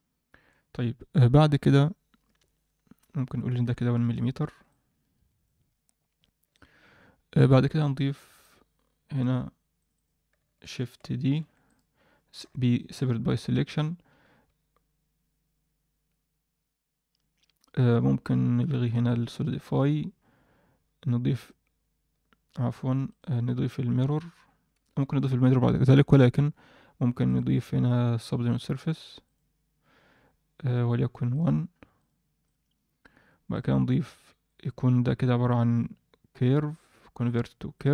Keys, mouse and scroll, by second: 3.4 click, 4.6-5.5 alt+middle drag, 6.5-7.6 middle drag, 7.7 alt+middle drag, 8.1 Tab, 8.4 middle click, 9.7 click, 9.9 click, 11.2 shift+d, 12.4 p, 13.0 Tab, 13.5 click, 14.1 Tab, 14.4 Tab, 19.4 click, 21.4 click, 23.0-25.1 drag, 27.2-29.3 drag, 31.3 click, 31.9-32.5 drag, 33.5 click, 34.4-37.9 right drag.